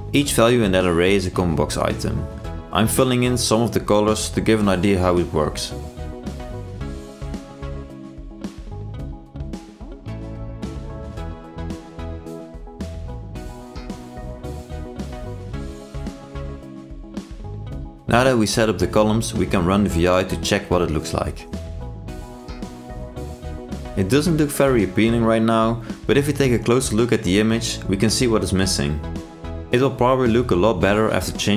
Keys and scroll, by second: 21.6 ctrl+e, 22.6 ctrl+r.